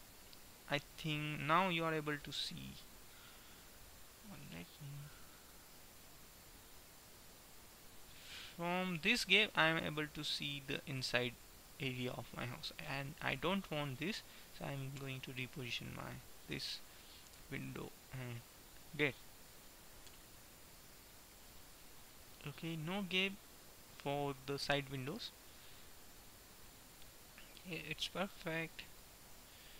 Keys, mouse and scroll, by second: 3.6-5.4 middle drag, 6.9-11.9 middle drag, 13.1-15.4 middle drag, 15.4-17.3 drag, 18.9-21.6 middle drag, 21.8 middle click, 22.6-24.9 middle drag, 25.8 middle click, 26.3 middle click, 29.4-29.7 middle drag.